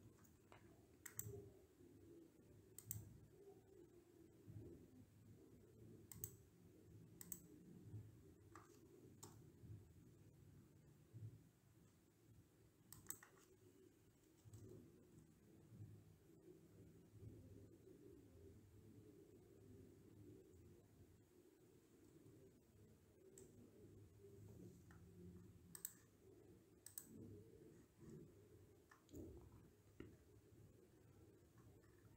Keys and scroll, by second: 9.0 Return, 14.0 Right, 14.4 BackSpace, 15.0 Return, 20.5 Left, 21.9 0, 23.2 Return.